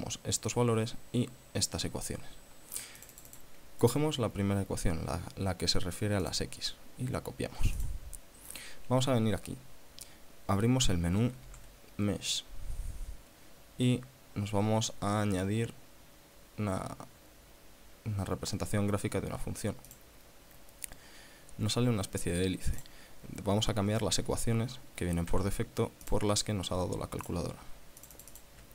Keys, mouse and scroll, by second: 3.2 click, 4.0 right click, 6.4 click, 8.1 click, 11.7 shift+a, 20.1 click, 23.0 click, 25.5 ctrl+v, 26.3 click, 27.5 click, 28.2 click.